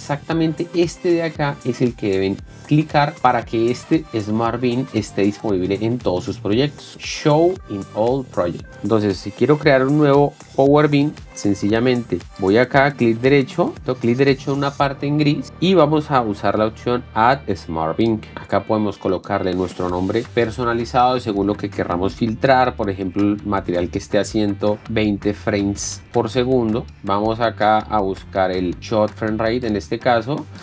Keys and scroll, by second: 23.2 2, 23.6 0, 24.8-27.0 typing.